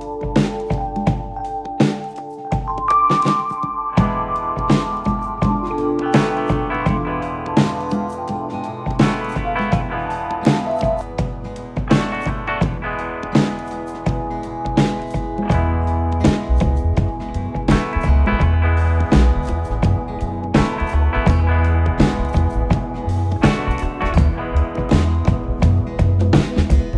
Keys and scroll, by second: 3.2 4, 5.6 3, 7.6 ], 8.7 4, 9.8 ctrl+F1, 14.0 ctrl+z, 15.9 3, 17.6 ], 19.8 4, 20.9 3, 22.6 4, 25.6 3, 26.0 ].